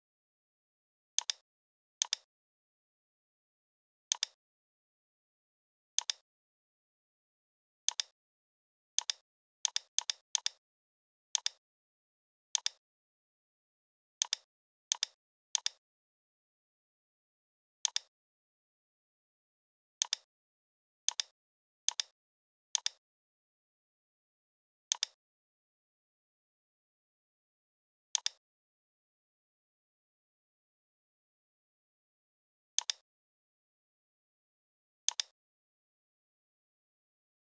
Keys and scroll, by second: 16.4 l, 19.0 shift+x, 20.4 v, 26.4 l, 30.8 i, 34.1 a, 36.2 BackSpace.